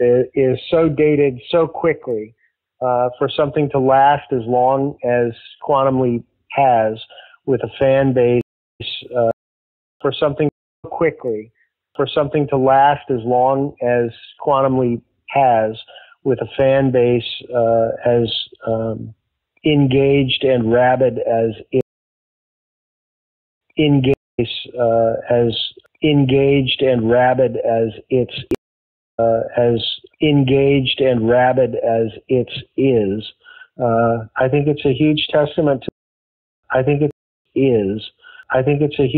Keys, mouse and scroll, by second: 4.8-8.4 drag, 8.3-10.7 typing, 9.7 ctrl+shift+Delete, 10.7 click, 13.8 click, 14.4-15.5 drag, 15.7 click, 16.7 ctrl+s, 18.2 click, 20.7-21.7 drag, 21.7 space, 22.3 ctrl+shift+Return, 23.0 ctrl+shift+Delete, 23.5 space, 24.0 space, 24.1 click, 24.3 space, 26.5 click, 27.5 click, 28.4 space, 29.0 click, 29.1 space, 30.7 ctrl+s, 35.0 click, 35.8 space, 36.3 ctrl+shift+Delete, 36.5 space, 37.0 space, 37.3 click, 37.3 space.